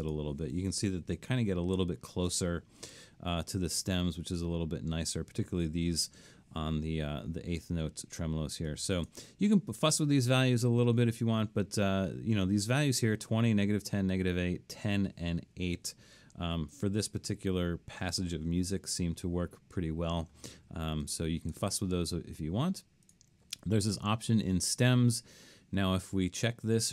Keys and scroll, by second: 1.4 super+=, 16.9 super+-.